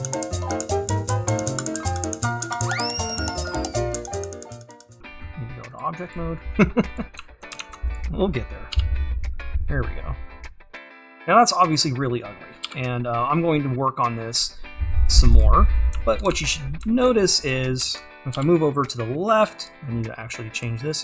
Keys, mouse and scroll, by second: 0.0 click, 0.2 click, 2.4 click, 2.9 click, 3.4 click, 4.2 click, 5.0-7.0 drag, 7.2 `, 8.0 click, 8.9 e, 11.5 g, 11.9-12.7 scroll up 1, 15.4 g, 16.6 scroll down 1, 17.5 click, 19.0 g.